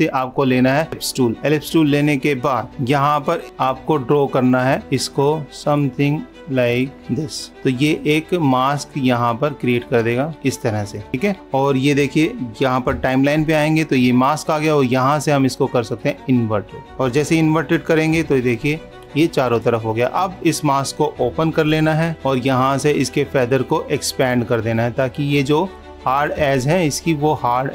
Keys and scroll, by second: 2.7 super+-, 18.4 super+-, 26.7 super+-.